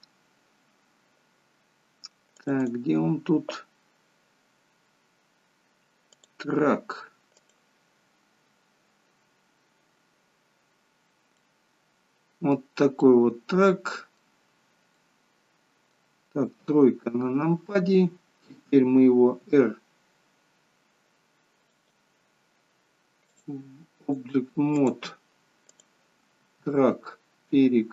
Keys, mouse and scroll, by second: 11.0 scroll down 1, 11.4 middle click, 13.1 middle click, 14.7 scroll up 2, 15.0 middle click, 16.7 KP_3, 19.5 r, 23.5 click, 24.1 click, 25.9 click, 26.5 r.